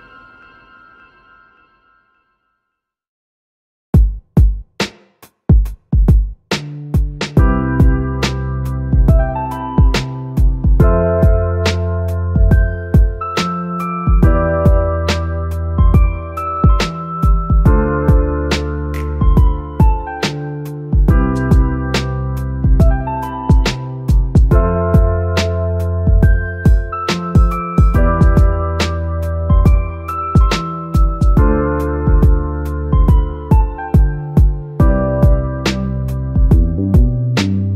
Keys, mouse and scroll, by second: 0.0-5.2 drag, 5.9 click, 6.9-11.3 drag, 11.3-12.3 scroll up 3, 12.3-16.6 drag, 25.4 scroll down 2, 26.9 scroll down 3, 27.1-30.8 drag, 31.2-31.9 scroll up 2, 31.9-32.5 middle drag, 32.5 click, 34.2-37.0 drag.